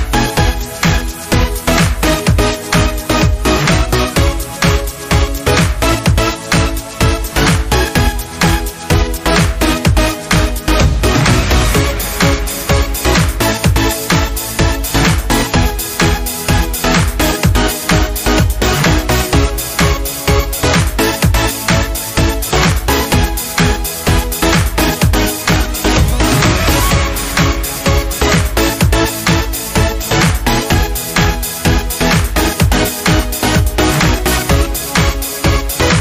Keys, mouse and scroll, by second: 1.3 ctrl+v, 2.7-11.5 drag, 11.5 ctrl+c, 14.6 ctrl+v, 20.2 click, 21.0 right click, 23.8 click, 28.3-31.8 drag, 33.6-35.6 drag, 35.6 scroll down 1.